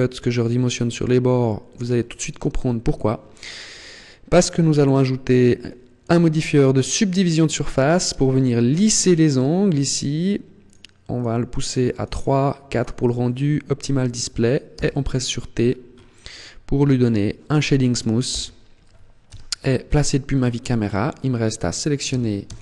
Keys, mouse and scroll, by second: 1.5 click, 2.5 Tab, 4.2 click, 7.7 middle click, 10.4 click, 10.9 click, 11.7 click, 11.9 click, 12.5 click, 14.5 t, 15.4-15.9 scroll up 7, 16.8 click, 17.5 click, 18.1 t, 19.2 KP_0, 20.2 Tab, 21.9 a, 22.2 a.